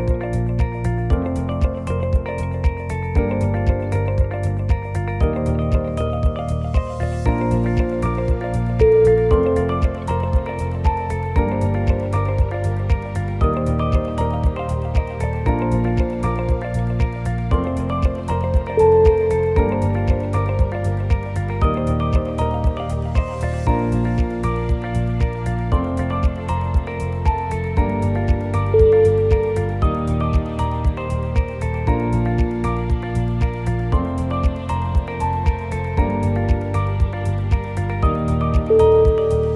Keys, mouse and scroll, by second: 1.1 e, 1.9 g, 3.1 e, 4.3 e, 5.1 g, 6.8 e, 7.7 g, 8.8 e, 9.8-13.3 typing, 14.9 g, 15.5 g, 16.5 e, 17.3 g, 18.4-21.4 typing, 22.2 shift+middle click, 22.5 scroll up 2, 23.0 shift+middle click, 23.4 e, 24.3 g, 25.7 g, 26.3 g, 27.4 e, 28.5 g, 29.7 shift+middle click, 30.5 e, 31.2 g, 32.2 g, 32.8 g, 33.9 e, 35.3 click, 35.5 shift+click, 35.9 f, 36.7 shift+click, 37.6 shift+click, 37.8 f, 38.1 shift+middle click, 38.5 click, 38.8 shift+click, 39.1 f, 39.3 shift+middle click.